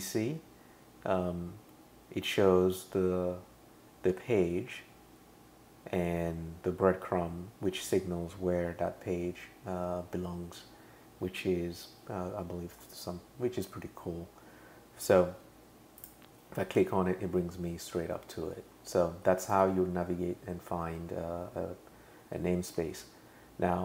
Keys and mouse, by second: 16.0 click, 22.8 super+[.